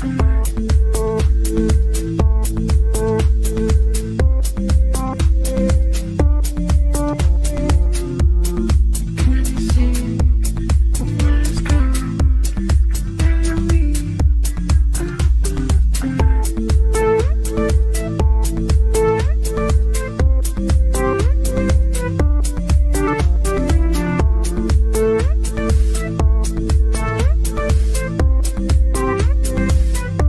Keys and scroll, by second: 27.1 e.